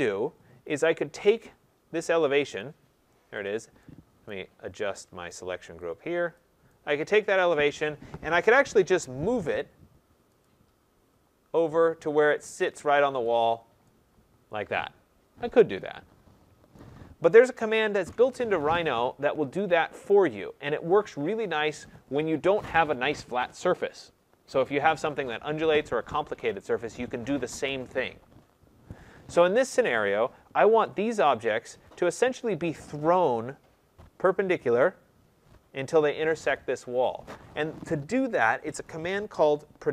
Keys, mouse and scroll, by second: 0.0-0.8 scroll, 0.8 click, 2.5 click, 3.4 click, 4.2 right click, 4.5 middle click, 5.2 right click, 6.3 click, 7.2 right click, 8.5-8.8 typing, 8.8 Return, 10.4 click, 12.1 click, 12.5-13.2 scroll, 13.2 click, 13.9 typing, 16.7 right click, 17.9 ctrl+z, 18.9-19.6 scroll, 19.6-20.0 scroll, 20.0 right click, 30.8 click.